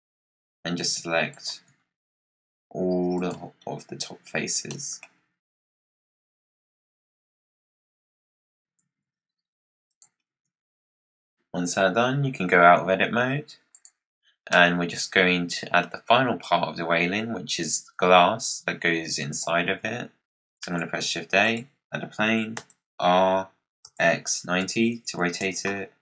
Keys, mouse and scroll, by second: 0.0-0.6 scroll down 1, 0.6 scroll down 1, 1.2 shift+click, 1.7-2.3 scroll down 1, 2.3-3.1 scroll up 1, 3.1 click, 3.5-4.3 scroll down 6, 4.3-4.6 scroll up 3, 4.6 middle click, 5.1 scroll up 2, 5.3 middle click, 5.6 shift+click, 5.7 middle click, 6.0 shift+click, 6.3 shift+click, 7.0 shift+click, 7.3 click, 8.0 shift+click, 8.2 shift+click, 8.3 scroll up 1, 8.4 middle click, 8.7 e, 10.2 Tab, 10.9 scroll down 3, 13.2 scroll down 3, 13.6 click, 14.4-17.4 middle drag, 20.5 shift+a, 22.5 r.